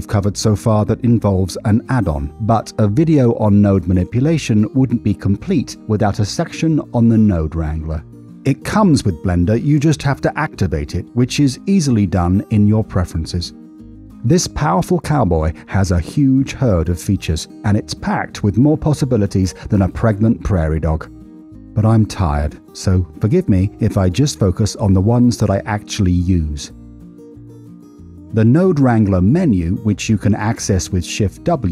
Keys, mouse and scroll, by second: 0.4-3.9 drag, 9.5-12.6 drag, 13.5 click, 14.9-15.8 drag, 17.6 middle click, 18.0 middle click, 18.2 middle click, 18.5 middle click, 18.7 middle click, 18.9 middle click, 19.1 middle click, 19.3 middle click, 19.4 middle click, 19.6 middle click, 19.8 middle click, 20.0 middle click, 20.2 middle click, 20.4 middle click, 20.6 middle click, 20.8 middle click, 21.0 middle click, 21.2 middle click, 21.3 middle click, 21.5 middle click, 21.7 middle click, 21.9 middle click, 22.1 middle click, 22.3 middle click, 22.4 middle click, 22.6 middle click, 25.1-26.6 drag, 28.1 middle click, 30.7 shift+w.